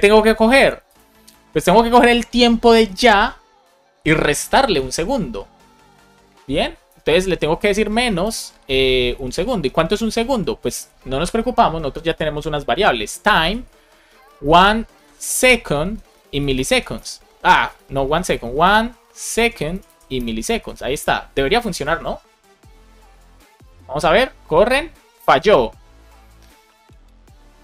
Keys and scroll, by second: 6.8 space, 8.1 space, 14.1-14.8 typing, 16.1 Down, 16.9 Return, 17.7 super+z, 18.5 shift+e, 19.3 Down, 20.1 Return, 20.3 super+s.